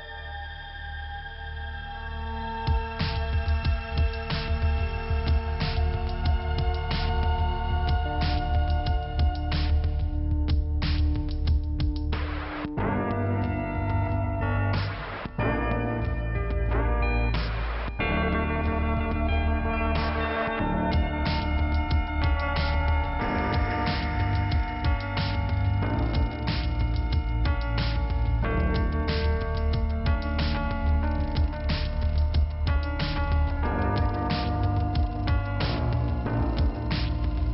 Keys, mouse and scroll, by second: 0.8 double click, 0.9 click, 2.3 click, 2.4 click, 3.1 click, 5.6 click, 5.8 click, 7.3 click, 10.6 click, 12.6 click, 12.6 click, 14.8 click, 17.0 click, 17.1 click, 17.7 scroll down 2, 17.9 click, 18.8 click, 18.9 click, 23.0 scroll up 1, 24.3 scroll down 1, 25.4 click, 29.7 scroll up 1, 30.1 click, 30.2 click, 30.3 click, 32.1 click, 34.2 click, 34.3 click, 34.9 click, 37.0 click.